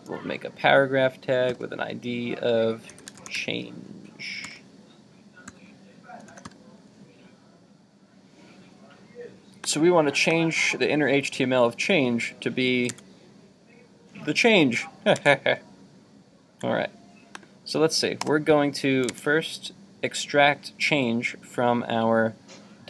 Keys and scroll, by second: 12.9 super+Tab, 15.3 super+Tab, 19.1 super+Tab.